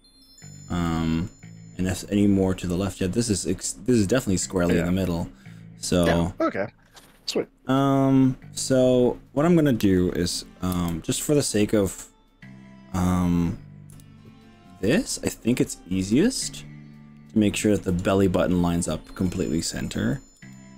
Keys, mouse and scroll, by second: 0.9 shift+middle click, 1.5-2.6 shift+middle drag, 4.4-5.5 middle drag, 5.9 middle click, 13.9 KP_1, 15.1 shift+middle click, 15.4 shift+middle click, 16.1-17.3 shift+middle drag, 17.5 shift+middle click, 20.4 g.